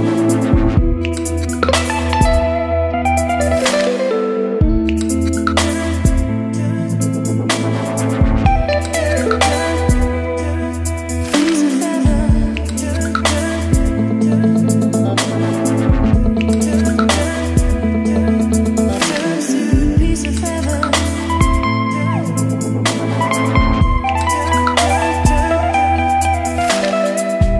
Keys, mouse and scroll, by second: 0.0-12.5 drag, 13.7-19.6 drag, 20.7-23.2 drag, 23.2-24.1 scroll down 2, 24.1-25.5 scroll down 1, 27.2-27.5 drag.